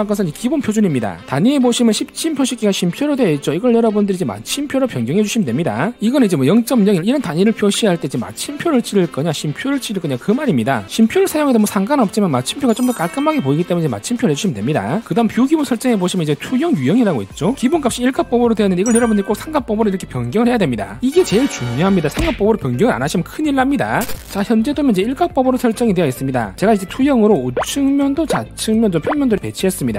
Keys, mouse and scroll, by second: 4.0 click, 5.6 click, 16.2 click, 20.5 click, 27.2 click, 27.8 click, 28.6 click, 29.6 click.